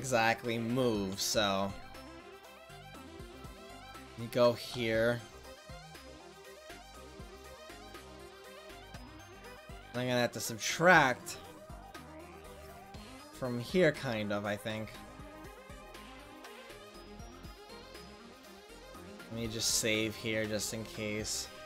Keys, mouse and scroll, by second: 2.0-2.4 middle drag, 4.7-9.4 drag, 10.2-13.7 drag, 13.4-13.9 middle drag, 18.1 ctrl+z, 18.7 ctrl+z, 19.4 ctrl+s.